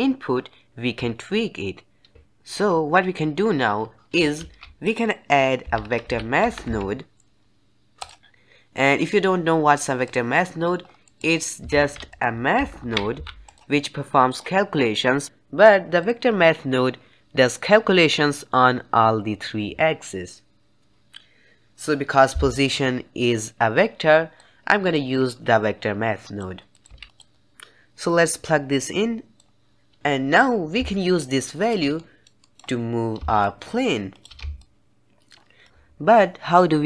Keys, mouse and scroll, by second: 4.3 shift+a, 10.3 middle click, 10.7 scroll down 2, 10.9 middle click, 11.6 shift+a, 15.9 click, 23.7 click, 24.8 click, 26.6 click, 26.8 x, 28.2-29.6 drag, 30.8 shift+click, 31.9-33.3 middle drag, 33.3 shift+click, 34.5-35.6 shift+drag.